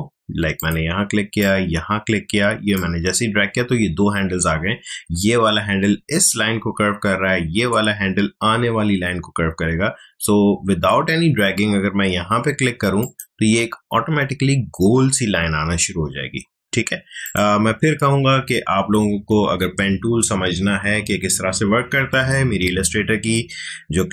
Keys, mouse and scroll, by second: 0.6-5.3 drag, 13.0 click, 17.2 click.